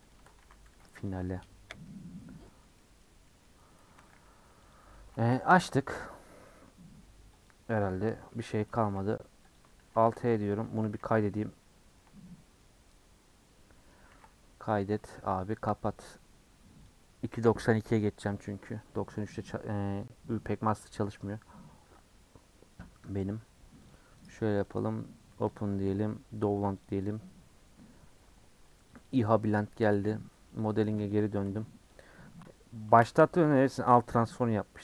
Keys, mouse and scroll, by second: 0.1 click, 0.2 Tab, 0.4 a, 1.1 alt+click, 1.3 middle click, 1.9-2.5 scroll up 3, 2.5 middle click, 3.0 scroll down 1, 3.2 middle click, 3.9 a, 4.7 u, 4.9 Tab, 5.8-6.4 scroll down 9, 6.4 scroll up 1, 6.4-6.8 middle drag, 6.9-7.5 scroll down 3, 7.5 click, 7.9 click, 8.0-8.7 scroll down 2, 8.7 space, 9.8 alt+h, 10.3 click, 10.5 ctrl+middle click, 10.8 ctrl+s, 11.0 ctrl+s, 11.3-12.7 middle drag, 12.7 ctrl+scroll down 1, 12.8-14.1 ctrl+middle drag, 14.1 ctrl+s.